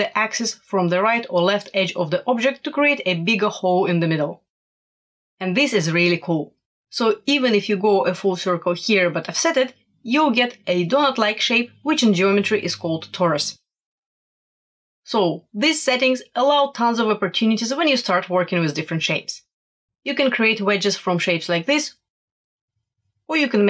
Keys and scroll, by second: 8.2-9.6 typing, 14.0 1, 14.3 8, 15.3 0, 19.8 super+-, 20.3 super+-, 20.9 shift+super+e, 21.9 shift+super+e.